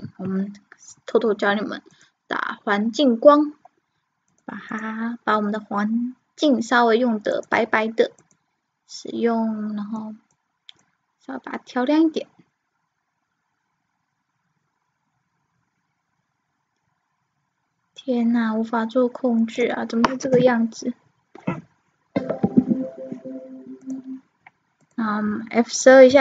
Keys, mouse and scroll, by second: 0.0 Escape, 3.2-5.0 drag, 6.0 click, 8.6-9.8 drag, 26.1 click.